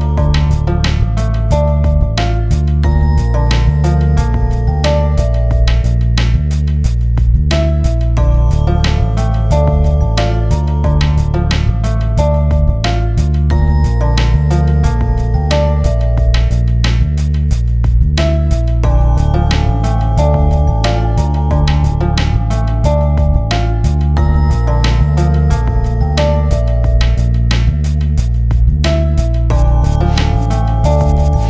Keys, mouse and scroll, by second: 8.9-11.4 drag, 12.2-14.8 drag, 15.1-17.7 drag, 21.3 scroll up 1, 22.4-23.8 drag, 23.8 scroll down 1, 25.8-28.4 drag.